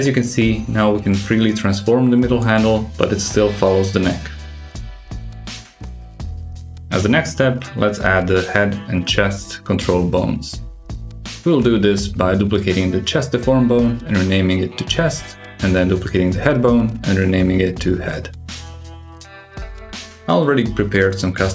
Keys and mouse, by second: 1.3 click, 1.6 g, 2.9 click, 3.4 click, 3.9 g, 6.8 a, 7.1 a, 7.4 click, 9.1 click, 9.5 shift+d, 10.2 s, 11.0 ctrl+alt+s, 12.1 F2, 16.3 click, 16.9 shift+d, 17.7 s, 18.7 ctrl+alt+s, 20.1 F2.